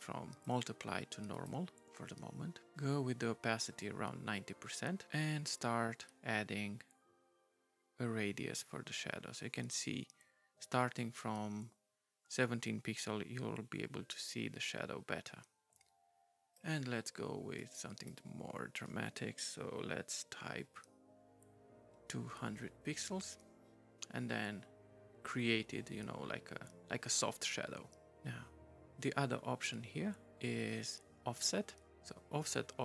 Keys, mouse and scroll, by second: 0.4 right click, 1.3 right click, 5.6 right click, 17.6 right click, 19.6 Delete, 20.5 2, 22.3 0, 22.8 Return.